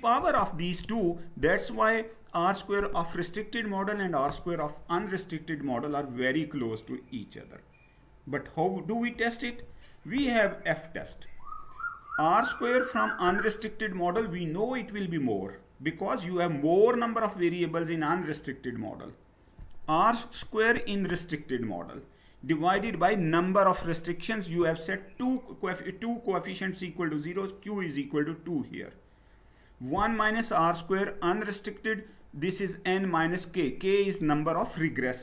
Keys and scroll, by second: 9.5 Down.